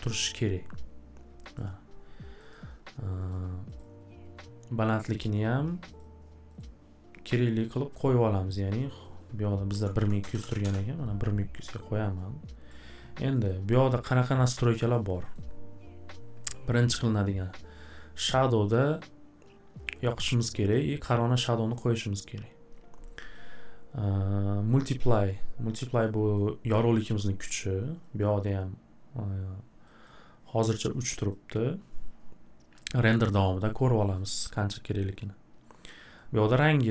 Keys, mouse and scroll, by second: 1.5 click, 2.5 scroll, 3.3 click, 3.8 click, 5.4 click, 6.0 click, 6.6 click, 7.7 click, 8.0 click, 8.9 click, 9.0 click, 9.5-10.7 typing, 12.7 click, 13.5-13.8 scroll, 14.2 middle click, 14.9 click, 15.3 middle click, 18.9 click, 20.7 click, 21.7 click, 23.3 click, 25.1 click, 26.3 click, 28.2 click, 30.0 click, 31.3 click, 34.1 click, 36.2 click.